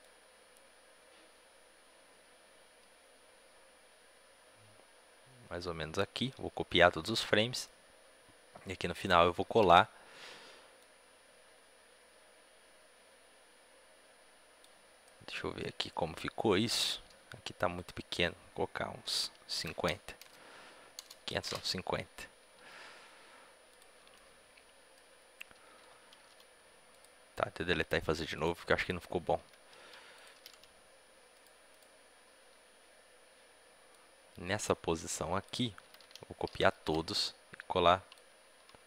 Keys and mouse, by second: 7.6 ctrl+c, 7.6-9.3 drag, 9.3 ctrl+v, 10.7-12.4 drag, 15.0 middle click, 15.0-21.3 drag, 22.5 g, 24.0-26.9 drag, 26.9 x, 28.2-35.7 drag, 33.8 b, 35.7 a, 35.9 a, 37.0 ctrl+c, 37.0-38.8 drag.